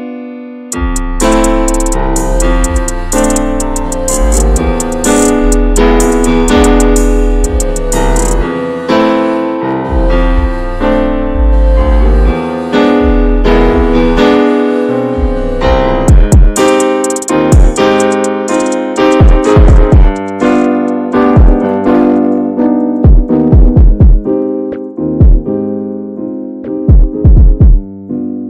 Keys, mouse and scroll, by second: 1.2 click, 1.5-2.6 scroll down 13, 2.6-3.8 shift+middle drag, 3.8-4.3 scroll up 1, 4.3 middle click, 5.2 shift+middle click, 5.4 scroll up 2, 6.1 shift+middle click, 6.2-6.7 scroll up 4, 6.8-12.8 shift+middle drag, 12.8 click, 13.3-14.1 scroll down 7, 14.1 shift+middle click, 14.7 scroll down 2, 15.0 middle click, 15.7 shift+scroll up 1, 15.8 scroll down 1, 16.1-17.2 middle drag, 17.2-17.7 shift+scroll up 4, 17.7 shift+middle click, 18.4-19.9 middle drag, 19.9-20.6 scroll up 3, 20.6-22.1 shift+middle drag, 22.1-28.4 drag.